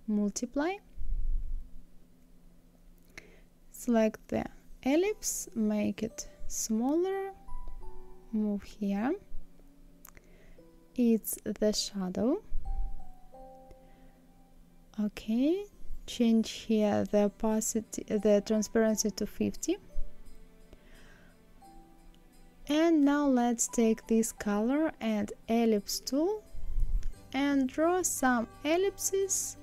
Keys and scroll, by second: 15.3 KP_5, 15.6 KP_0, 15.8 Return.